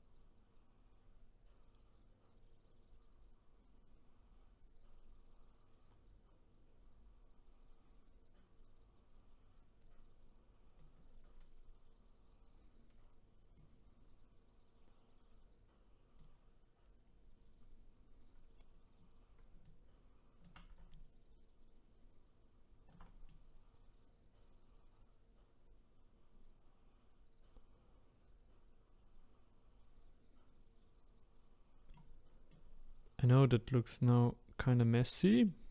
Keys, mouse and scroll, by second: 13.5-19.7 drag, 19.7-23.3 shift+right drag, 23.3-26.3 middle drag, 32.5-35.7 middle drag.